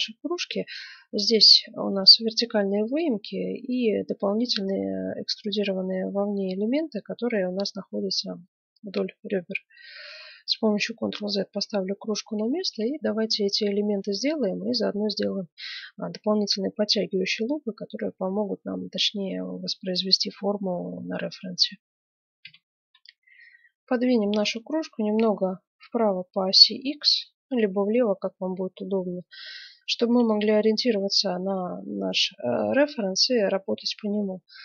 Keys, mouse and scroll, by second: 9.1-11.1 middle drag, 10.9 ctrl+z, 12.4-16.3 middle drag, 22.4 F9, 25.1-26.5 middle drag, 26.5-28.4 drag, 29.4-32.1 middle drag, 32.1-32.8 scroll up 1.